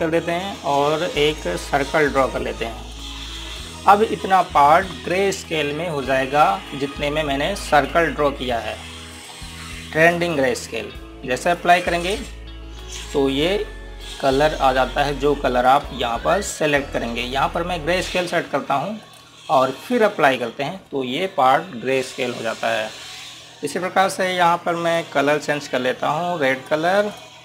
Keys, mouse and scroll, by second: 3.1-3.7 scroll up 1, 3.7 click, 8.4 click, 16.4 click.